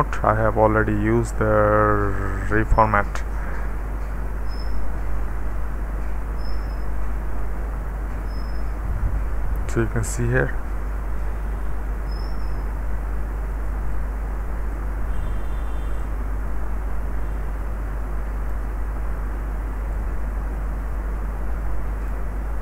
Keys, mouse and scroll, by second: 0.0 space, 1.2 click, 2.8 d, 5.3 space, 7.4 d, 10.1-18.5 drag, 19.9-22.2 drag.